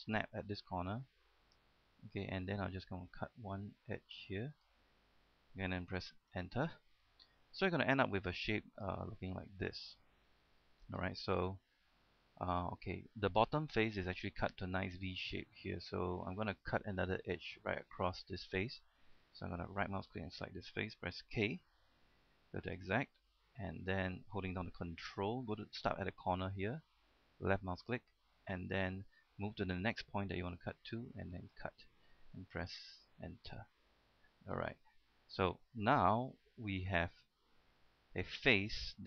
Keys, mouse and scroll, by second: 0.2 ctrl+click, 4.7 ctrl+click, 6.5 Return, 7.2-7.8 scroll down 1, 7.8-10.3 middle drag, 10.6-11.0 scroll up 1, 11.0 scroll down 1, 11.2 middle click, 12.8-13.1 scroll up 1, 13.1-16.6 middle drag, 21.8 k, 22.9 click, 28.0 ctrl+click, 31.6 ctrl+click, 33.1 Return, 33.5 scroll down 1, 33.7 middle click, 34.8 scroll up 1, 35.0 middle click, 36.3 shift+middle click, 37.1-39.0 shift+middle drag.